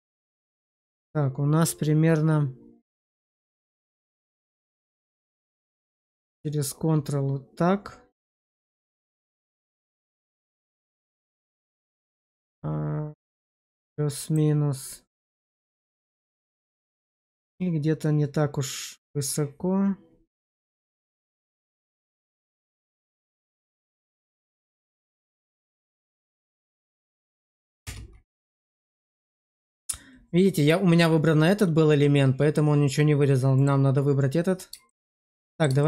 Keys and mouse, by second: 4.5 click, 20.7 click, 24.3 click, 25.5 click, 27.9 space, 34.8 shift+middle drag, 35.1-35.5 middle drag, 35.7 shift+middle click.